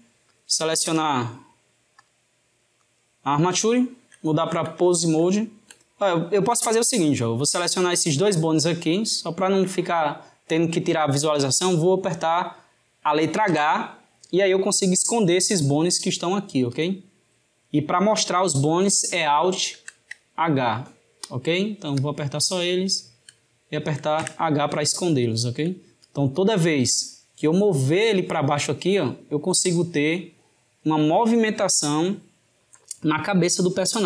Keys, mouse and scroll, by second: 1.9-3.7 drag, 3.7-7.4 shift+middle drag, 7.4 drag, 8.7 shift+click, 16.8 drag, 19.7 alt+h, 21.3 drag, 22.0 drag, 22.8 shift+drag, 24.2 h, 25.2-26.0 shift+middle drag, 26.0 click, 27.4 click.